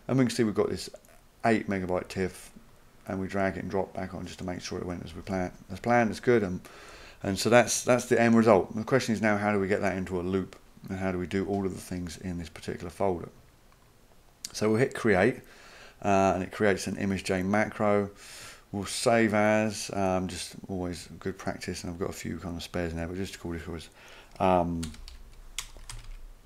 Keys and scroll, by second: 24.6-26.4 typing.